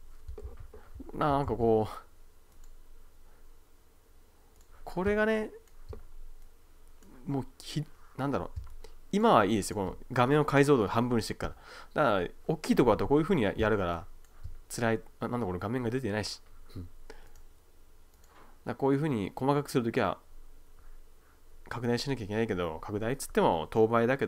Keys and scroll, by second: 0.5 super+z, 5.2 space, 8.6 space, 13.0 \, 13.6 space.